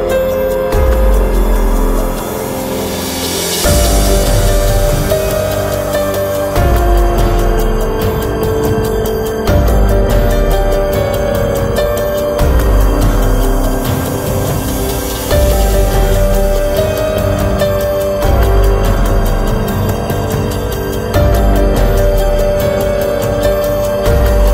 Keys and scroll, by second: 3.6 Return.